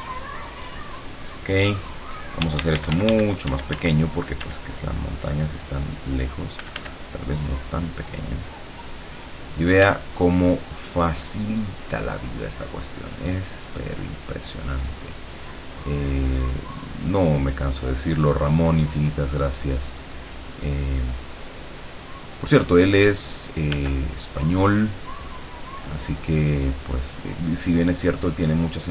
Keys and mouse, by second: 2.5 d, 5.4 click, 6.6 f, 7.2-23.8 drag, 9.9 f, 23.8 f, 24.0-28.9 drag.